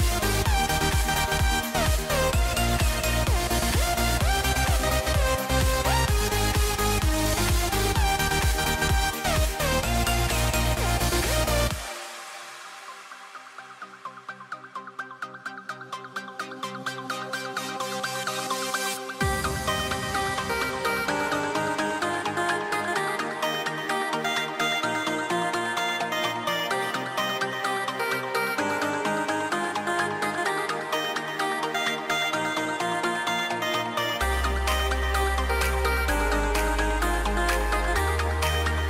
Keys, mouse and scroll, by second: 2.2 c, 10.4 ctrl+b, 15.0 e, 24.9 g, 30.3 a, 35.8 e.